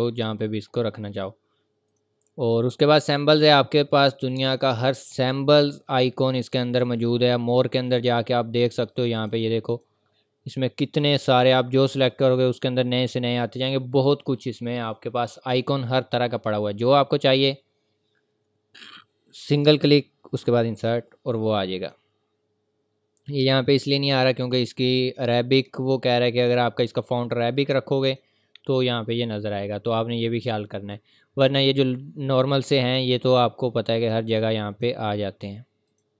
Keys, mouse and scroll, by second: 5.0-5.5 scroll down 1, 10.4-12.1 scroll down 1, 12.1 click, 13.2 scroll down 1, 19.5 scroll down 1, 19.5 click, 27.7 click, 31.5 click.